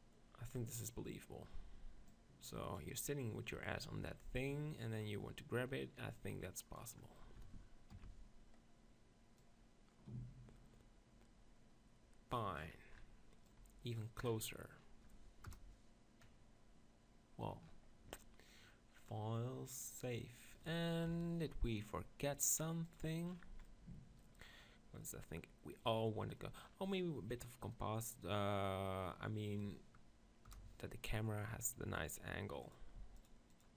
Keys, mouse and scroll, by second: 0.5-4.0 drag, 4.0-6.1 middle drag, 6.1-7.9 drag, 12.5 middle click, 13.5-15.4 drag, 15.4-17.6 middle drag, 15.6 KP_0, 19.1 middle click, 19.2-20.9 drag, 21.0 KP_7, 22.9-24.8 drag, 24.8-25.9 middle drag, 30.5 KP_0, 32.6-33.7 drag.